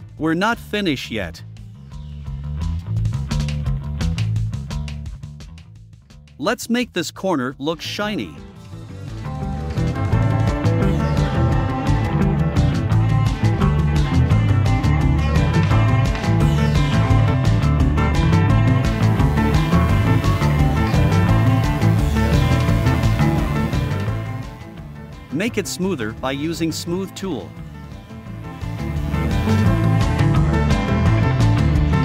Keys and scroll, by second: 19.3 a, 21.3 super+j, 29.7 f, 30.9 v.